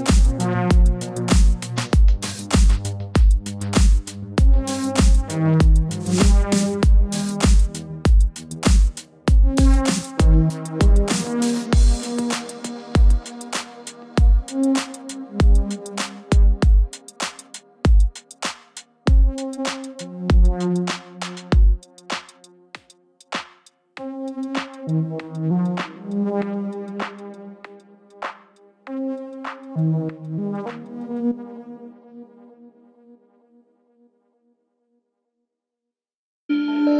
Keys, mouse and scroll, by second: 0.8 alt+click, 1.8-2.2 drag, 2.2 middle click, 2.8 alt+a, 4.0-6.2 middle drag, 6.2-7.5 drag, 7.5 middle click, 7.9 ctrl+z, 9.3-10.3 drag, 10.3-13.1 shift+middle drag, 13.1-13.6 scroll up 2, 13.6 middle click, 14.2 click, 15.1 click, 15.3 scroll up 1, 15.4-17.1 middle drag, 17.1 alt+a, 18.2-19.4 drag, 19.4-21.3 shift+middle drag, 21.3-21.6 scroll down 2, 21.6-24.8 middle drag, 24.8-25.1 scroll up 2, 25.5-26.8 shift+middle drag, 26.8-30.0 drag, 31.5-33.6 drag, 33.6-34.5 shift+middle drag, 34.5 alt+click.